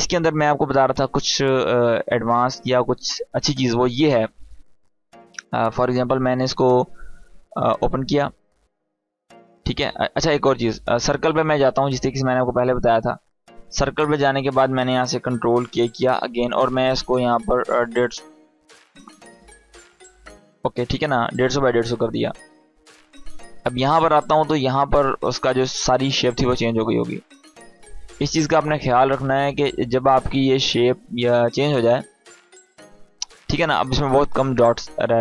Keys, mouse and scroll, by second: 4.5 click, 13.9 right click, 14.3 click, 15.4 ctrl+k, 17.1 click, 18.6 Tab, 21.2 click.